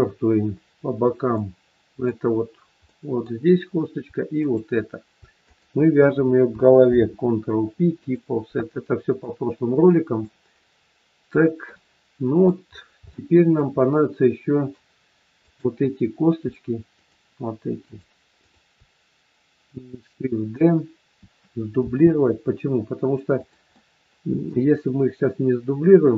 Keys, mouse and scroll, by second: 0.5 scroll up 3, 1.4 middle click, 2.9 middle click, 4.3 shift+click, 5.6 shift+click, 6.7 ctrl+p, 8.7-9.1 scroll down 1, 9.1 middle click, 10.4 scroll down 2, 11.6 middle click, 11.6 scroll down 1, 12.6 scroll up 2, 13.0 shift+middle click, 13.7 middle click, 15.2 click, 16.9 shift+click, 18.6 shift+click, 21.9 shift+d, 23.6 middle click.